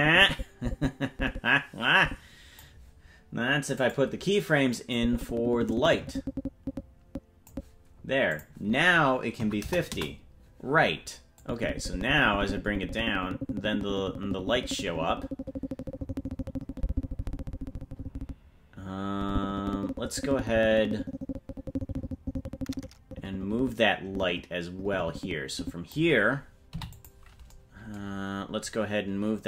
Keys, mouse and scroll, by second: 3.9 click, 5.0-7.6 drag, 8.3-10.5 drag, 11.4-26.0 drag, 28.1-28.7 scroll down 9, 28.2 i.